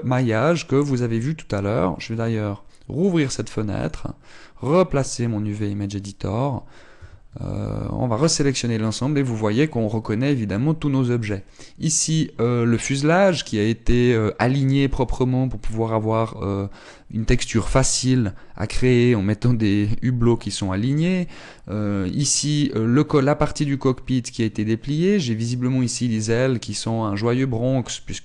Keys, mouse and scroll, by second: 2.7 click, 6.8 click, 7.5 a, 7.9 a, 10.7 scroll down 9, 11.0 a.